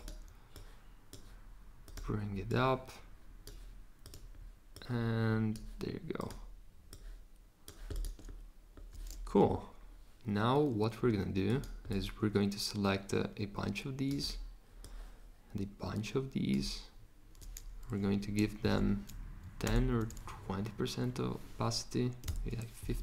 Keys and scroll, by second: 18.6 1, 19.6 2, 21.9-22.7 typing.